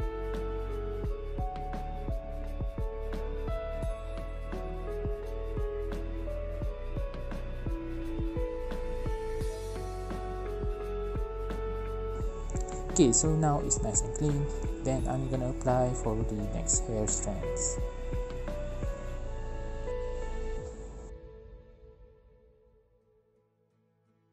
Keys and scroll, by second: 0.0 ctrl+z, 0.8-1.9 typing, 1.2 ctrl+z, 1.3 ctrl+z, 1.5 Down, 1.5 Right, 1.5 Left, 1.6 Left, 1.9 Return, 2.8 ctrl+alt+o, 3.0-5.9 typing, 5.1 ctrl+z, 7.3 r, 9.3 ctrl+alt+j, 9.3 ctrl+z, 9.7-10.3 typing, 10.0 Left, 10.2 ctrl+alt+e, 11.2 ctrl+z, 11.4 ctrl+z, 11.5 ctrl+z, 12.7 ctrl+j, 13.3 ctrl+z, 14.3 ctrl+j, 15.3-16.5 typing, 16.3 Left, 16.4 ctrl+alt+e, 17.0 ctrl+z, 19.1-21.8 typing, 20.8 ctrl+j, 21.8 Return.